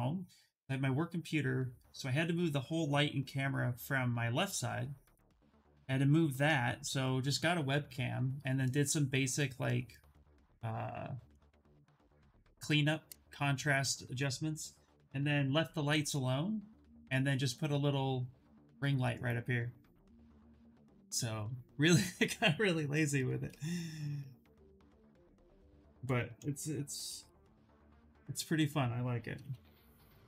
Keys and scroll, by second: 26.5-29.0 typing, 30.0 shift+d.